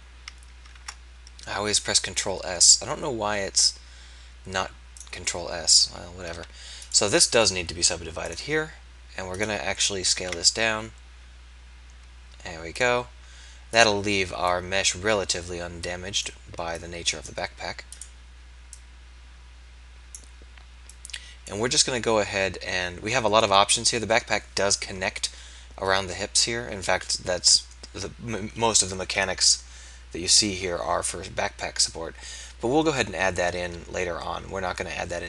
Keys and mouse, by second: 0.8 ctrl+a, 5.1-6.8 drag, 10.2 ctrl+a, 29.1 KP_3.